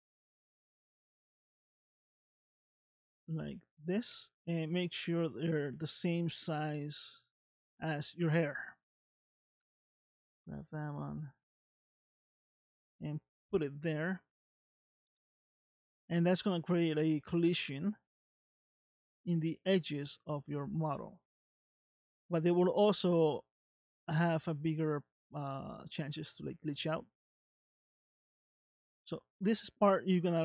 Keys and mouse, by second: 1.7 shift+click, 2.8 click, 4.0 s, 8.5 shift+middle click, 9.4 click, 10.3 s, 15.0-16.2 middle drag, 17.7 middle click, 18.9 middle click, 20.9 middle click, 22.0 middle click, 23.2 middle click, 25.4 middle click, 26.7 middle click, 28.6 ctrl+z.